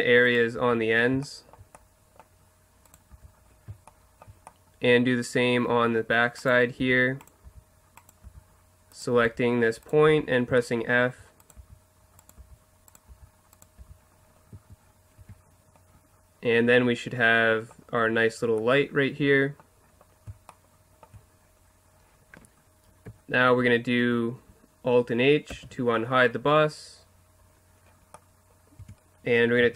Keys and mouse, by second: 0.2-1.9 right drag, 0.6 f, 2.1 right click, 3.1 f, 6.8-10.1 typing, 10.6-11.0 middle drag, 11.6-14.5 typing, 14.8 middle click, 15.2 Tab, 25.5 alt+h, 28.8 Tab, 29.6 z.